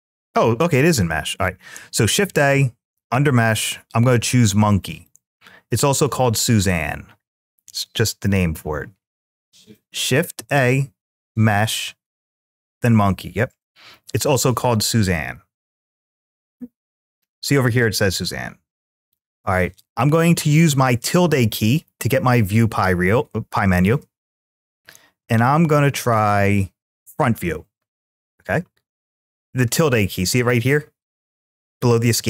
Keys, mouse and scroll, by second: 9.2 middle click, 9.2-9.5 scroll up 2, 19.5 `, 24.4 `, 28.7 click, 29.9 `.